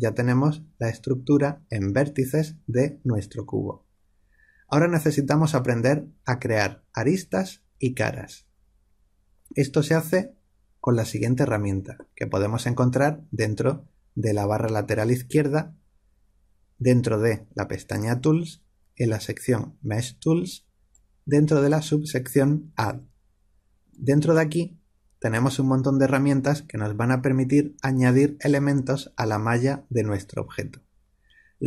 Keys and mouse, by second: 20.8 click.